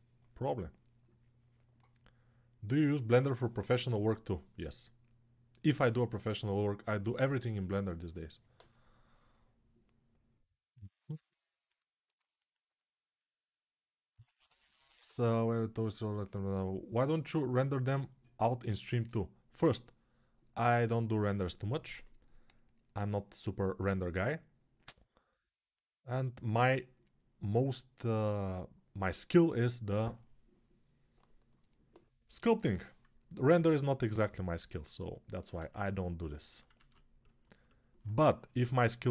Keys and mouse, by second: 34.1 ctrl+s, 36.6 alt+q.